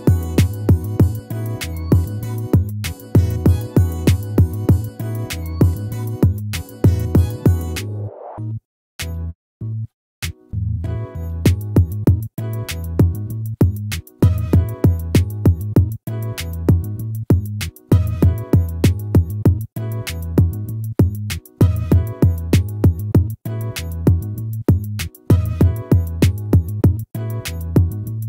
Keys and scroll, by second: 7.2 ctrl+-, 27.5 ctrl+z.